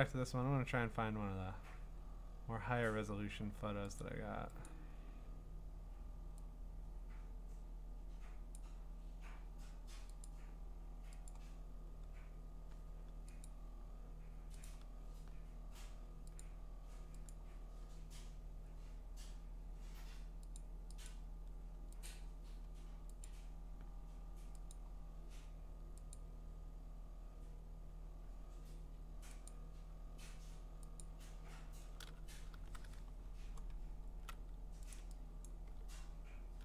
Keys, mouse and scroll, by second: 0.5-2.8 scroll down 33, 2.8-3.9 scroll up 1, 3.9 scroll up 1, 4.0 click, 4.5 scroll, 4.7 click, 5.2-6.0 scroll, 8.5 click, 9.2 middle click, 10.2 click, 11.3 click, 11.7 middle click, 11.9 middle click, 12.4-13.4 scroll, 13.4 click, 14.8 click, 15.0-15.4 scroll, 16.4 click, 17.3 click, 17.6-19.4 scroll, 20.6 click, 21.1 click, 22.1 click, 22.3-22.8 scroll, 23.2 click, 23.8 middle click, 24.0 middle click, 24.7 click, 25.3 middle click, 26.3 click, 26.8 scroll, 27.8-28.4 scroll, 28.5-29.1 scroll, 29.5 click, 30.4 middle click, 31.0 click, 31.4 middle click, 31.5 middle click, 32.5 v, 32.6-34.2 scroll, 33.6 middle click, 34.9 ctrl+click, 35.5 click, 35.9-36.4 scroll.